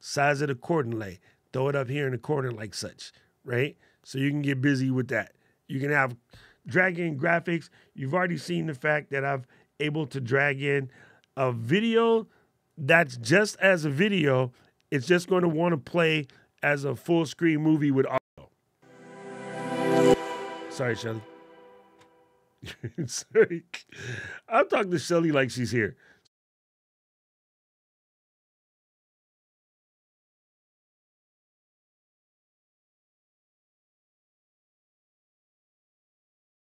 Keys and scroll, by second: 33.2 super+`.